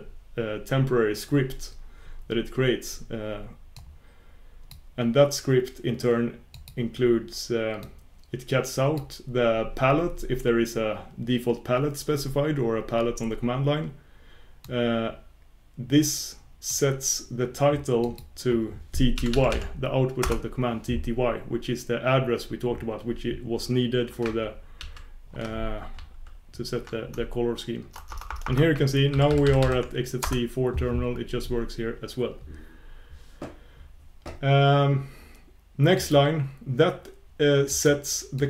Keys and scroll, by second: 18.0 shift+super+q.